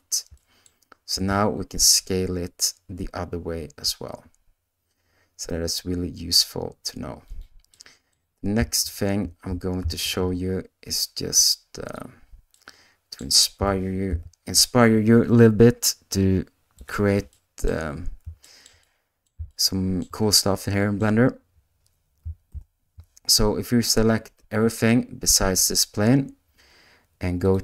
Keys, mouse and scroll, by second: 0.3 middle click, 1.1 s, 7.7 middle click, 8.8 alt+a, 10.0 shift+a, 12.6 middle click, 13.5 g, 17.3 middle click, 18.5 shift+middle click, 18.9 middle click, 19.5 shift+middle click, 20.3 middle click, 22.5 ctrl+i.